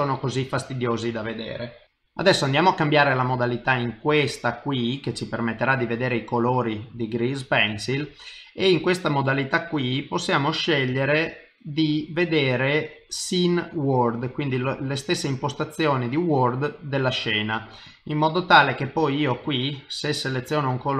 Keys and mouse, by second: 0.5 middle click, 3.9 click, 8.5 click, 17.9 click.